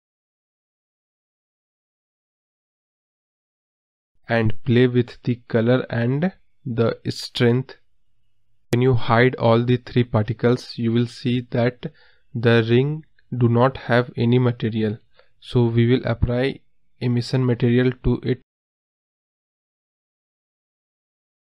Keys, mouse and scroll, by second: 0.7-1.8 drag, 3.6-4.0 drag, 4.0-5.3 scroll up 1, 5.3 click, 8.2 click, 9.7 scroll up 1, 9.9-11.8 scroll down 2, 11.8 click, 12.4 click, 13.9 click, 14.4 x, 20.9-21.4 drag.